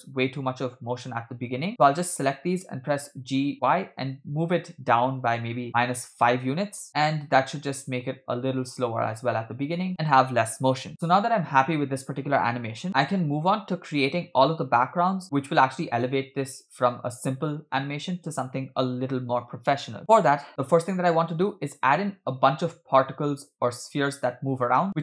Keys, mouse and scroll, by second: 0.8 space, 1.7 click, 3.0 g, 6.9 click, 6.9 space, 11.0 space, 17.8 space, 20.5 click, 20.5-21.0 scroll down 4, 21.0-21.5 scroll up 3.